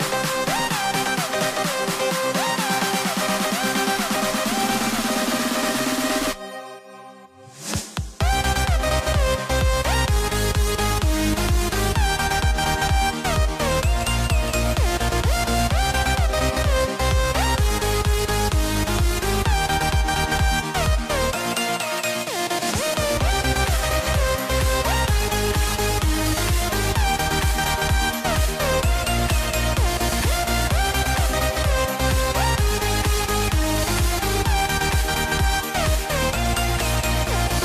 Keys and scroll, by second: 16.7 super+c, 16.9 super+b, 17.3 shift+Down, 17.5 shift+Up, 22.0 super+z, 23.1 super+z, 37.2 super+z.